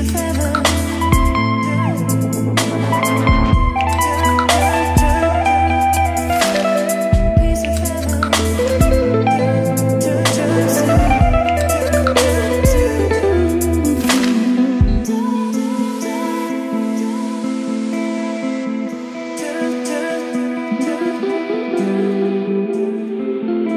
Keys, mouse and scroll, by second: 0.0-1.3 typing, 0.3 click, 1.6 Left, 1.7 Return, 2.4 shift+3, 4.0 click, 4.3 Return, 5.1-7.3 typing, 6.2 Down, 7.2-8.7 drag, 8.5-12.8 typing, 12.7 click, 15.3 Return, 15.5 shift+`, 16.2 shift+3, 18.7 click, 20.1 e, 21.3 click, 22.1 d, 23.6 a.